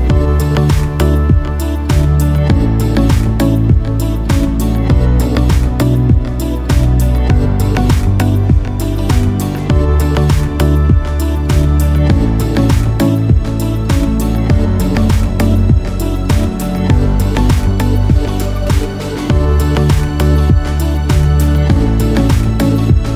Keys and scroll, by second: 1.5 ctrl+alt+shift+a, 19.1 ctrl+alt+shift+e.